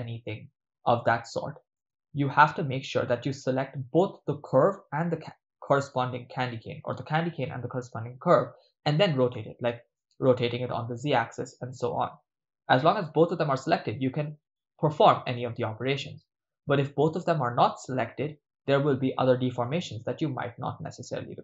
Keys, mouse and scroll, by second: 4.1 click, 10.5 r, 11.5 z, 18.2 click, 20.9-21.4 ctrl+middle drag.